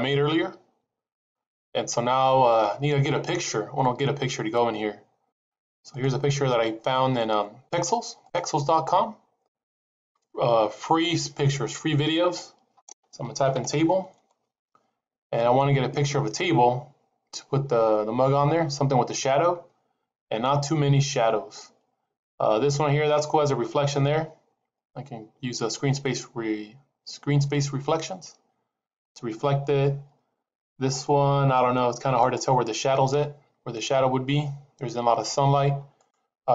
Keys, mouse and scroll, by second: 2.2-3.3 scroll down 3.